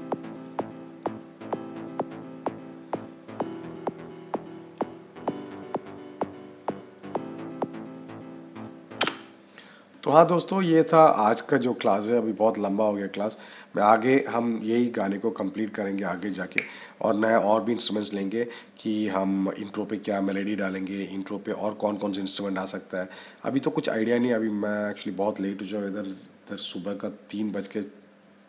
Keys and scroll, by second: 8.8 -.